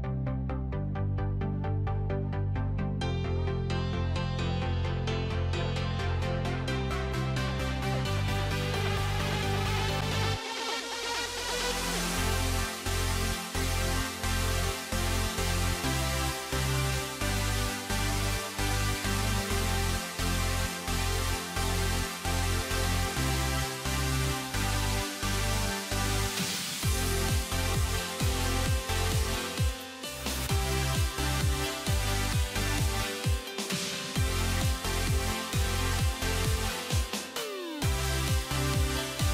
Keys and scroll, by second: 3.0 alt+x.